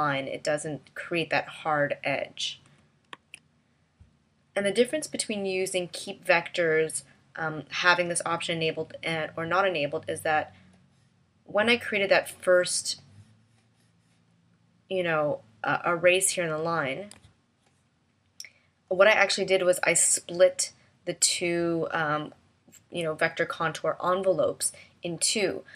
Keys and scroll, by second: 3.1 super+z, 17.2 a.